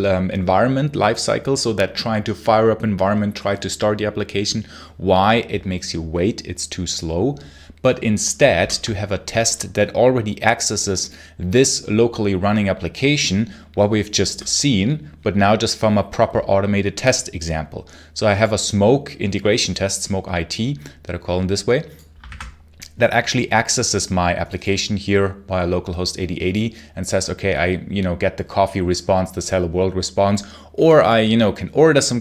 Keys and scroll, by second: 8.5 super+l, 22.1 ctrl+b.